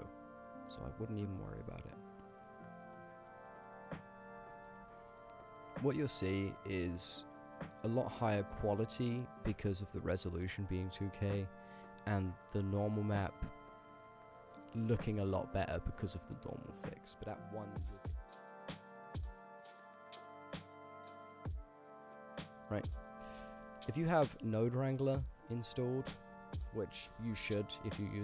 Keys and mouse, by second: 3.5 middle click, 4.5 shift+middle click, 4.9-5.2 ctrl+drag, 5.7 shift+drag, 9.6 middle click, 10.1 click, 10.2 g, 15.9 click, 17.4 ctrl+z, 17.4 click, 18.6 middle click, 19.1 click, 19.3 click, 19.8 click, 20.4 click, 23.3 ctrl+z, 24.6 click, 26.1-28.2 drag.